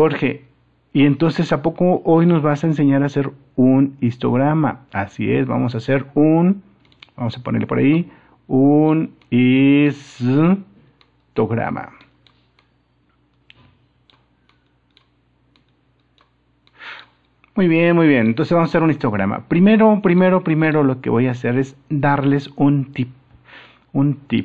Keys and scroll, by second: 2.5 super+-.